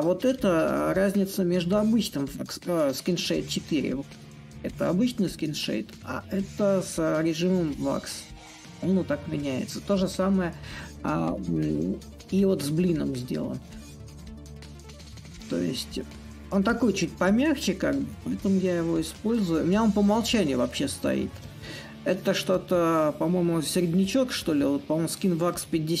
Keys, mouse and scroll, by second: 0.8-5.8 right drag, 7.4-12.4 right drag, 14.4-19.2 right drag, 19.2-26.0 drag.